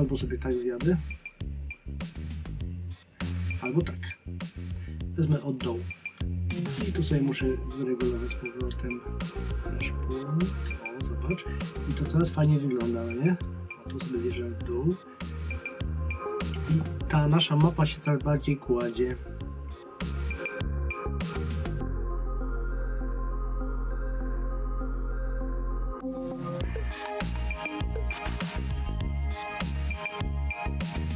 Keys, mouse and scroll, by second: 7.3 click, 11.9-13.4 scroll down 1, 19.2 click, 21.2 click.